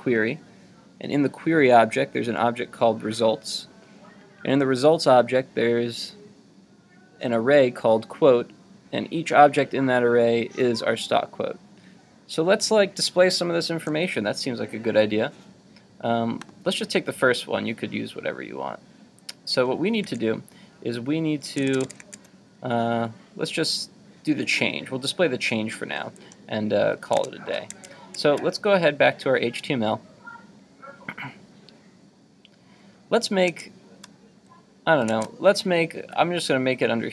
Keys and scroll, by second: 20.0 super+Tab, 27.2 super+Tab, 33.5 super+Tab, 35.2 super+Tab.